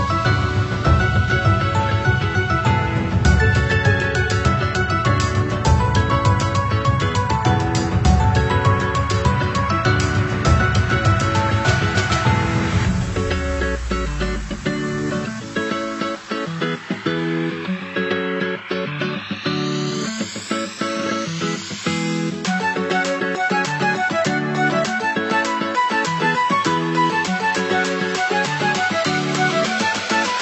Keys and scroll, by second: 6.9 ctrl+c, 7.1 ctrl+v, 11.0 ctrl+0, 17.0 ctrl+=, 19.5 Up, 27.0 ctrl+0.